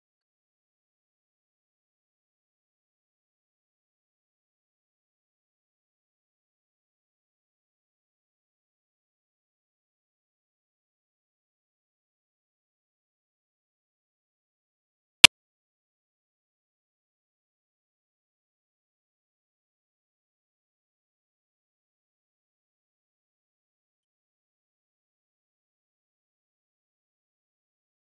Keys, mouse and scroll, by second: 2.5-9.8 ctrl+shift+drag, 9.8-11.4 middle drag, 11.4 ctrl+shift+click, 12.4-12.8 scroll down 6, 12.8-14.2 middle drag, 14.2 ctrl+shift+click, 20.5 z, 20.9 shift+middle click, 21.3 scroll down 1, 21.4 shift+middle click, 21.6 scroll up 1, 21.7 click, 21.8 Tab, 21.9 click, 22.2 Tab, 22.5 click, 22.9 middle click, 23.1 scroll up 1, 23.2 click, 23.2-25.5 typing, 23.5 click, 24.0-24.4 scroll up 2, 24.1 middle click, 24.4 click, 25.0 middle drag, 25.4 middle click, 25.5 click, 26.5-27.7 drag, 27.8 click.